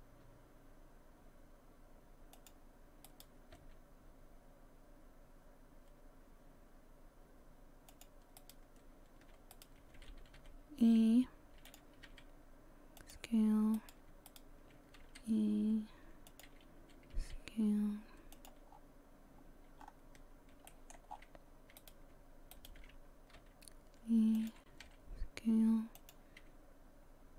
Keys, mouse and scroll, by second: 3.1 right click, 3.6 g, 8.4 right click, 9.5 shift+right click, 10.4 e, 13.4 s, 13.8 right click, 14.3 shift+right click, 15.0 e, 18.2 s, 18.7-19.4 scroll down 5, 19.4-19.8 scroll down 1, 19.8-20.2 scroll up 4, 20.7 shift+middle click, 21.1 scroll up 2, 21.8 right click, 22.5 shift+right click, 23.4 e, 26.4 5.